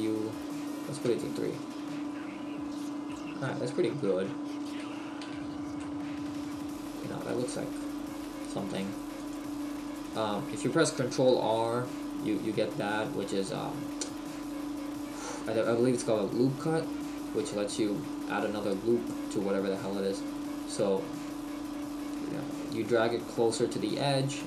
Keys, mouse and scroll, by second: 1.1 Tab, 3.1 middle click, 5.2 z, 5.8 middle click, 7.3 Tab, 8.6 ctrl+r, 10.0 right click, 10.4 ctrl+z, 11.3 ctrl+r, 24.1 click.